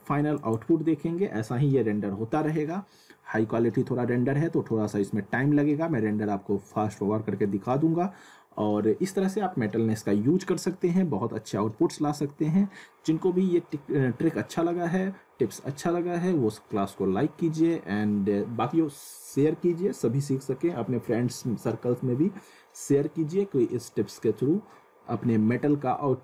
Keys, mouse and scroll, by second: 0.3 click.